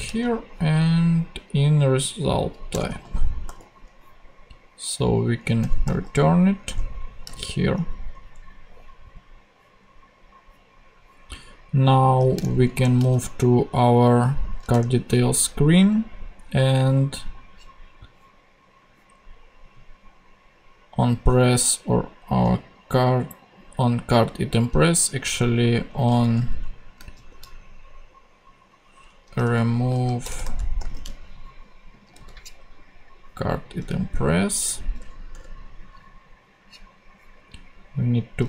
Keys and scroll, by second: 0.0 alt+shift+super+Left, 0.9 shift+super+c, 2.7 Return, 3.4 super+;, 4.1 ;, 5.6 Return, 5.8 r, 6.6 Return, 7.2 ,, 12.7 shift+super+o, 14.7 Return, 25.9 Left, 26.9 shift+Left, 27.1 shift+r, 29.1-31.4 typing, 32.2 super+c, 35.3 Return.